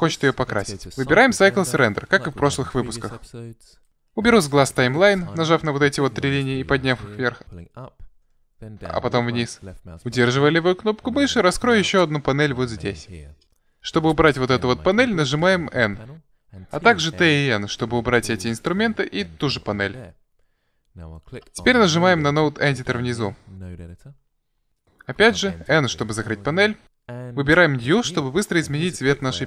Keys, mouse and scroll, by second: 1.9-3.3 drag, 11.6 click, 14.6 n, 16.7 t, 17.2 n, 21.0-22.8 drag, 25.9 n, 28.0 click, 28.4 middle click, 29.1-29.4 drag.